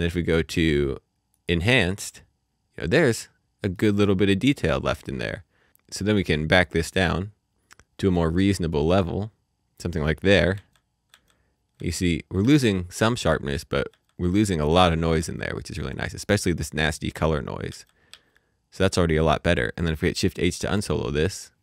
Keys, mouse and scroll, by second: 0.5 click, 2.4-3.0 scroll down 1, 3.1-3.7 scroll up 1, 3.7 middle click, 4.8-5.5 scroll down 1, 8.0 click, 10.5 ctrl+d, 11.1 ctrl+d, 11.7 ctrl+d, 12.4 ctrl+d, 13.2 ctrl+d, 13.9 ctrl+d, 14.6 ctrl+d, 15.2 ctrl+d, 15.9 scroll up 1, 16.6 middle click, 17.7 d, 18.1 d, 19.5-20.1 scroll down 1, 20.5 h.